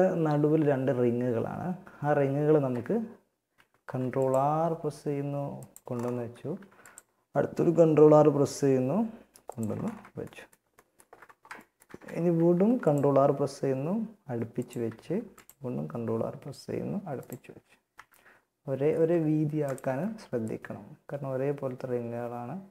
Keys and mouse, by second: 0.4 Tab, 1.0 a, 2.7 ctrl+r, 5.8 ctrl+r, 11.6 ctrl+r, 14.2 ctrl+r, 16.6 Tab, 17.2 Tab, 19.6 click.